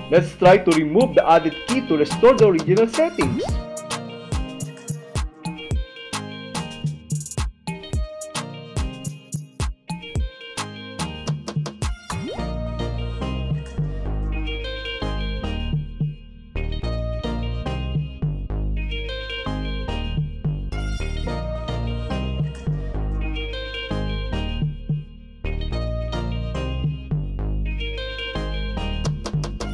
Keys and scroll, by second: 1.8 h, 2.9 h, 4.6 Right, 6.6 s, 8.2 Right, 9.3 m, 11.3 Right, 12.4 w, 14.4 w, 15.6 w, 16.8 w, 18.7 Right, 20.7 c, 22.2 Right, 23.9 p, 25.6 p, 26.6 Right, 28.1 e.